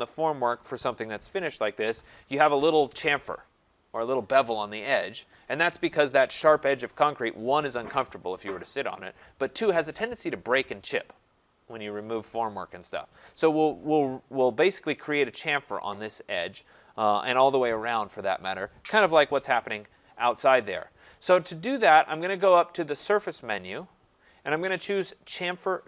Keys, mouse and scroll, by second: 23.1 click.